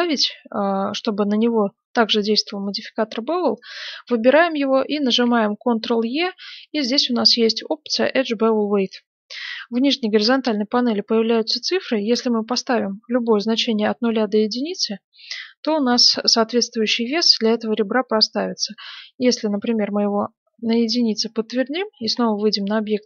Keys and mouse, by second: 2.6-4.6 right drag, 5.0 ctrl+e, 21.6 Tab, 22.5-23.0 middle drag.